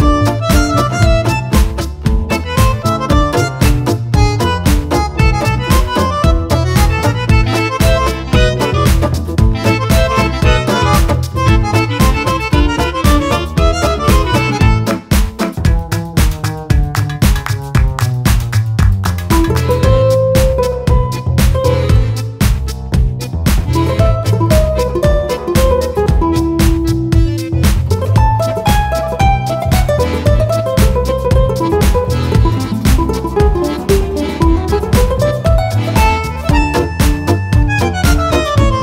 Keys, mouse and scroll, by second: 0.7 shift+click, 1.4-2.7 shift+drag, 2.9 shift+click, 3.5 shift+click, 4.4 shift+click, 5.2 shift+click, 5.9 shift+click, 7.5 shift+click, 8.2 shift+click, 9.2 shift+click, 10.8 click, 13.0 click, 14.4 right click, 17.2 click, 19.4 click, 23.8-26.0 drag, 27.9-30.2 shift+drag, 31.1-33.6 shift+drag, 35.6 click, 37.2 click, 37.9-38.8 drag.